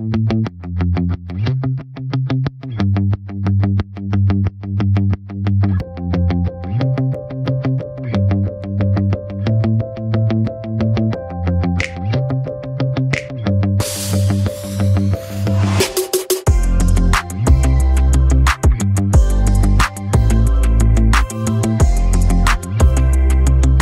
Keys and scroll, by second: 7.7 d.